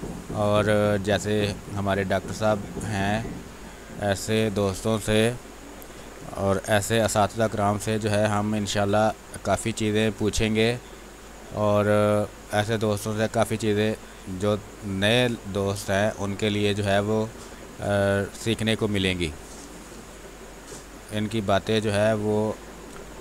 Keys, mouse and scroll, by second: 1.1 x, 1.3 click, 2.4 space, 2.6 click, 5.1 space, 5.3 r, 5.4 click, 6.6 b, 7.0 space, 9.1 click, 9.6 x, 9.8-14.9 drag, 14.9 click, 15.9 space, 16.1 click, 16.4 space, 16.9-22.9 drag, 22.9 space.